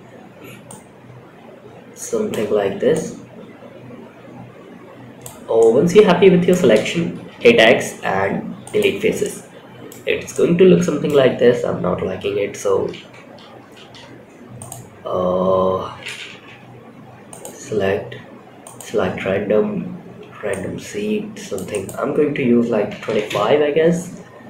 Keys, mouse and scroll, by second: 0.0-1.6 drag, 2.2-4.5 drag, 4.9 middle click, 6.6 x, 8.5 middle click, 9.6 middle click, 10.6 ctrl+z, 12.3 ctrl+z, 13.1 ctrl+z, 13.9 click, 15.8 3, 16.6-18.1 drag, 19.8-20.9 drag, 21.0-22.7 drag, 24.3-24.4 drag.